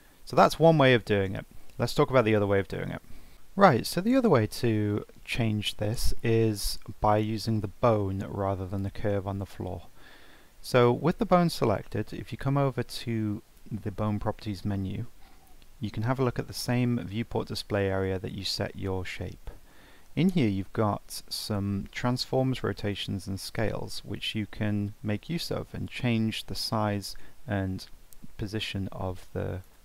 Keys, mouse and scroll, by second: 0.4 Tab, 1.1-1.5 middle drag, 1.5 scroll down 3, 1.8-2.4 middle drag, 2.4 z, 2.6-3.2 z, 3.3 middle click, 4.4 scroll up 2, 4.7-7.1 middle drag, 7.1 click, 8.7 click, 10.8 click, 15.8-19.0 scroll down 3, 24.2-27.2 drag, 29.7 ctrl+z.